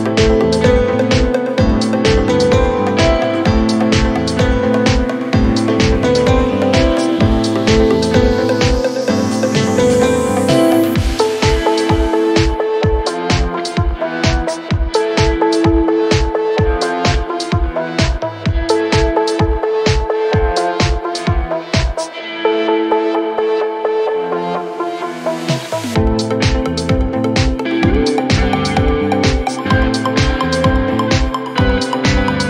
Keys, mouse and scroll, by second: 0.1 scroll up 2, 0.9 click, 1.2 scroll up 1, 1.2 Tab, 1.6 shift+middle click, 1.9 scroll up 2, 3.2 shift+middle click, 3.6-4.1 scroll up 1, 4.1-5.1 middle drag, 5.1 z, 6.6 ctrl+r, 10.4 Tab, 10.6 scroll down 2, 10.8 click, 11.0 middle click, 11.7 KP_1, 12.0-12.6 scroll down 1, 12.6 click, 12.9 scroll up 1, 13.0 Tab, 13.3 shift+middle click, 13.7 scroll up 1, 13.8 2, 14.6 alt+click, 14.9-15.4 scroll up 1, 15.4 shift+middle click, 15.9 s, 17.7 shift+middle click, 18.3 Tab, 19.6 Tab, 20.7 alt+click, 21.0-22.0 shift+middle drag, 22.0 r, 23.6 s, 24.4 Tab, 24.7-25.1 scroll down 2, 25.1 shift+middle click, 25.5 Tab, 25.8-26.6 scroll up 1, 26.6 alt+click, 27.0 s, 28.8 alt+click, 29.1 s, 30.5 Tab, 31.3 Tab, 31.7-32.4 shift+middle drag.